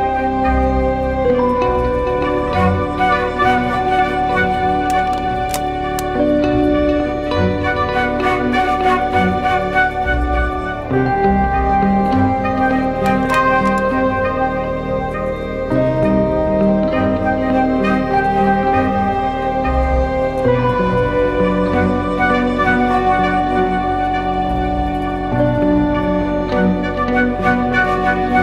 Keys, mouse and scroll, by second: 13.6 ctrl+t, 15.1 alt+shift+click, 16.8 Return, 22.4 ctrl+t, 23.9 alt+shift+click, 26.7 Return, 27.1 ctrl+t, 28.3 alt+shift+click.